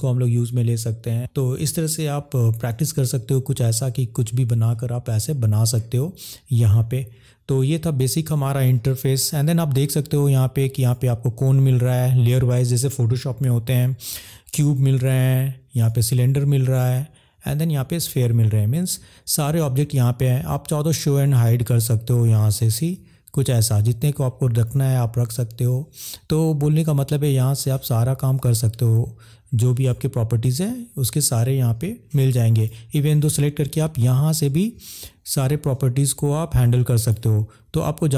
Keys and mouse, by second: 2.8 middle click, 21.3 click, 23.8 click, 34.9-36.3 drag, 36.5 click.